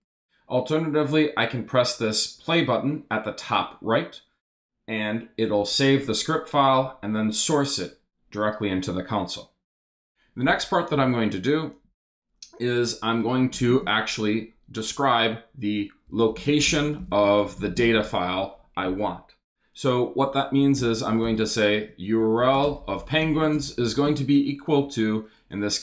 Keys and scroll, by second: 10.9 Return, 13.5 shift+3, 13.7 shift+space, 14.6 space, 15.8-18.5 typing, 20.5-24.8 typing.